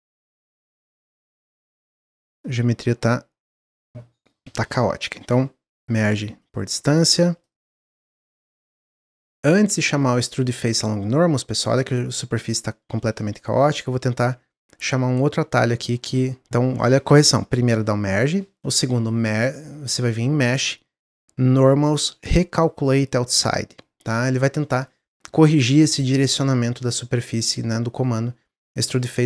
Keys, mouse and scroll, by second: 0.0 click, 0.7 ctrl+z, 1.5 3, 2.4 click, 2.8-4.4 drag, 4.4 ctrl+z, 4.8 a, 5.6 m, 6.7-7.1 scroll down 2, 7.1 middle click, 7.4 click, 8.0 a, 9.9-12.9 drag, 14.4 ctrl+z, 18.9-22.1 drag, 27.2-29.2 middle drag.